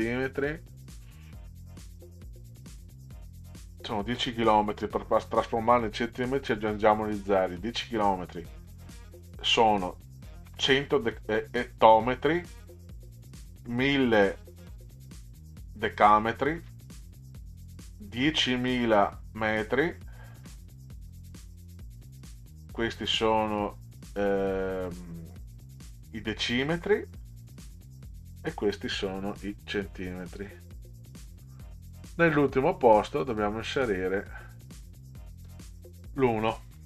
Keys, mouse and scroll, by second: 10.5 0, 13.6 0, 16.6 0, 20.5 0, 27.9 0, 32.1-33.1 drag, 33.8 click.